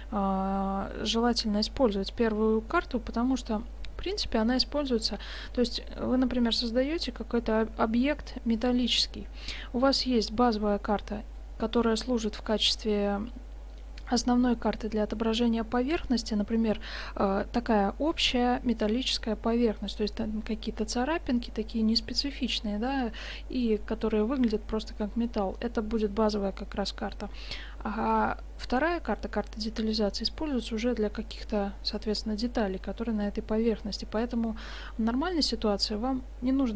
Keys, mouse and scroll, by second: 3.1-5.0 middle drag.